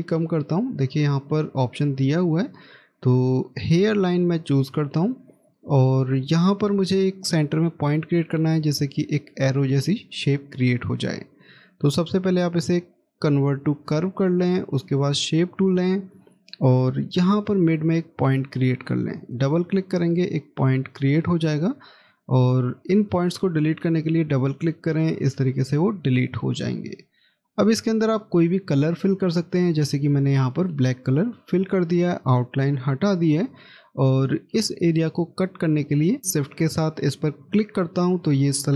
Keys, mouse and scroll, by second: 11.7 right click, 16.7 scroll up 1, 19.3 double click, 26.4 scroll down 1, 27.5 middle click, 31.5 right click, 37.2 shift+click.